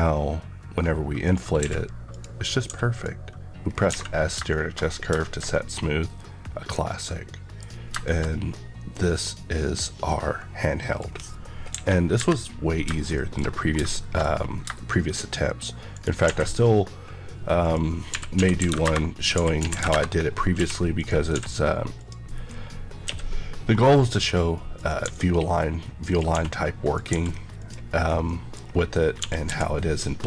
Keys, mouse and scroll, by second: 1.5 click, 1.5 q, 2.0 click, 2.6 s, 2.8 click, 3.5 scroll down 1, 9.9 scroll down 1, 11.0-11.7 scroll down 1, 13.0 KP_3, 13.1 middle click, 13.4 scroll up 1, 13.9 middle click, 14.2 scroll up 1, 15.8 right click, 16.2 a, 17.6 click, 18.0-23.0 typing, 18.8 Return, 19.9 Return, 20.5 KP_Enter, 20.9 click, 21.9 click, 24.7 click, 25.0 g, 26.0 click, 26.2 s, 26.8 click, 27.1 g, 27.5 click, 27.9 KP_Decimal, 28.2 middle click, 28.6 scroll down 1, 29.1 scroll down 1, 29.2 typing.